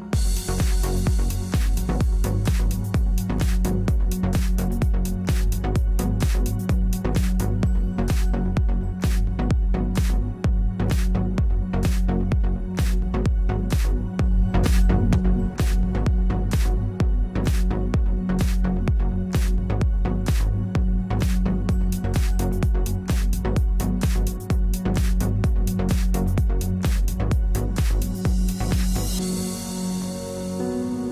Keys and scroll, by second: 5.9 space, 6.8 space.